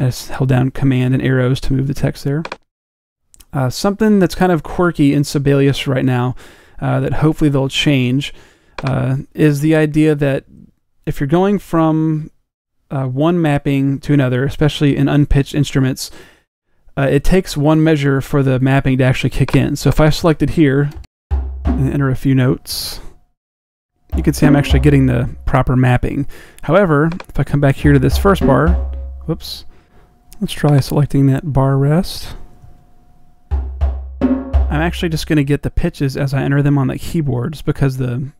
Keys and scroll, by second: 10.2 Escape.